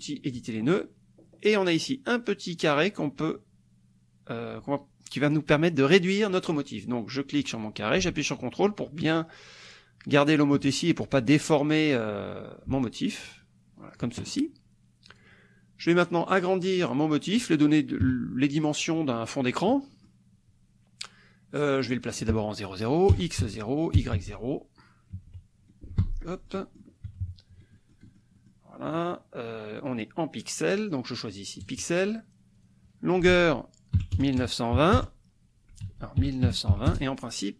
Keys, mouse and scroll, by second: 0.4 click, 2.9-14.2 drag, 15.1 click, 15.9 click, 16.3 click, 18.1 KP_Subtract, 18.9 click, 19.9 click, 22.0 click, 23.1 KP_0, 23.5 Tab, 24.1 KP_0, 24.2 Tab, 25.3 KP_Subtract, 26.0 Escape, 26.2 click, 26.4 scroll down 1, 26.6 click, 27.1 KP_Subtract, 27.7 middle click, 28.6 scroll up 1, 28.8 click, 29.8 click, 31.7 click, 32.6 click, 33.3 ctrl+a, 33.9 KP_1, 34.1 KP_0, 34.7 KP_2, 34.9 KP_0, 35.8 ctrl+a, 36.4 ctrl+KP_9, 36.7 ctrl+KP_2, 37.1 ctrl+KP_0.